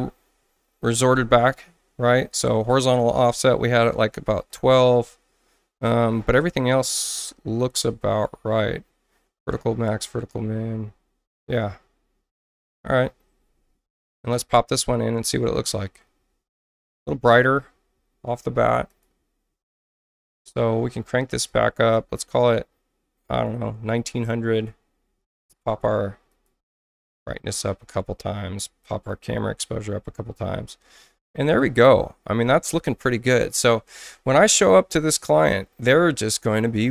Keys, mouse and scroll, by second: 2.7 click, 3.4-4.2 typing, 4.4 Tab, 12.5 click, 15.2 click, 18.9 click, 21.5 click, 22.4-23.4 drag, 24.0 9, 24.6 Tab, 25.3 click, 26.3 click, 26.7 click, 28.8 click.